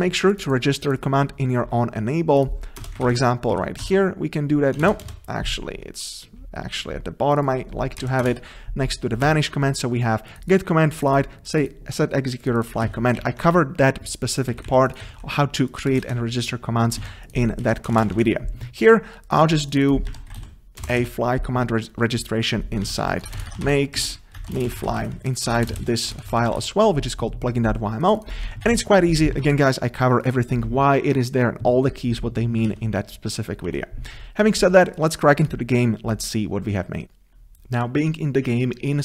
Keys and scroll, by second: 4.0 Escape, 4.8 ctrl+BackSpace, 9.3 Tab, 12.8 Tab, 13.2 ctrl+s, 14.7 Left, 16.0 Up, 17.4 ctrl+c, 18.2 ctrl+v, 25.5 ctrl+BackSpace, 32.7 ctrl+s.